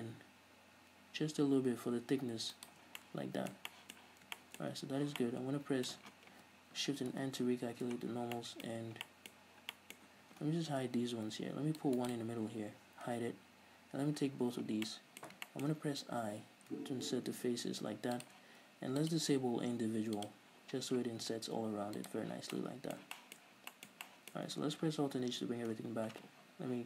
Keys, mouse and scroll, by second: 3.0 shift+click, 3.2 scroll down 2, 3.3-12.4 middle drag, 5.3 a, 7.5 shift+n, 8.3-10.1 scroll up 6, 11.1 ctrl+r, 12.4 click, 12.5 right click, 13.4 h, 14.6 l, 15.2-18.6 middle drag, 18.6 shift+click, 19.4 click, 20.6 click, 22.3 click, 22.7 scroll down 2, 22.9-26.8 middle drag, 25.6 alt+h, 26.1 Tab.